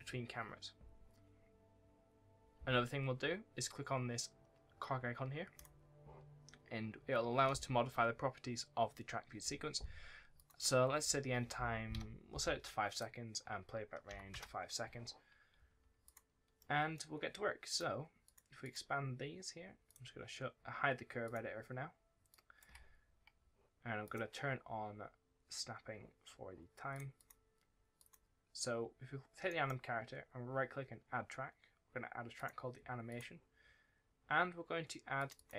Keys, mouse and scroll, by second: 5.4-7.0 scroll down 1, 7.4-8.3 scroll up 1, 8.3-8.8 scroll down 1, 8.8-10.3 scroll up 1, 10.3 click, 11.8 KP_5, 12.8 click, 14.0 KP_5, 14.2 KP_Enter, 15.6-16.0 scroll up 1, 16.0 click, 16.5 middle click, 17.6 click, 23.1-23.9 scroll up 1, 23.9 click, 25.3-26.6 scroll up 1, 26.8 click, 27.1 double click, 27.9 click, 32.3 click, 33.4-35.1 scroll up 1, 35.1 click, 35.3 double click.